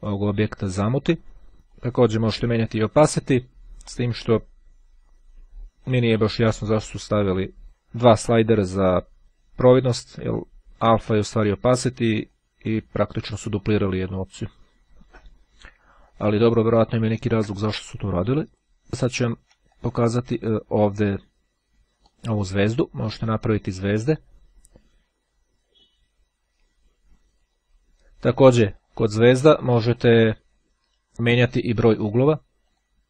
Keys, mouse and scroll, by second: 1.6-6.0 drag, 7.6 click, 11.2-13.4 drag, 14.1-15.1 drag, 16.0-16.7 ctrl+scroll down 2, 17.3 ctrl+scroll up 2, 17.8-18.8 ctrl+drag, 19.2-19.8 shift+scroll down 2, 19.8 shift+click, 22.1 click, 23.7-25.8 drag, 27.4 click, 32.0 click.